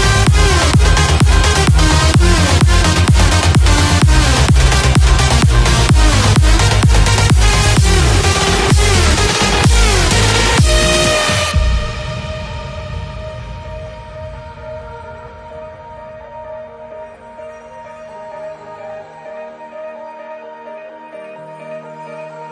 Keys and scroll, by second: 12.3 BackSpace, 16.8-22.0 typing.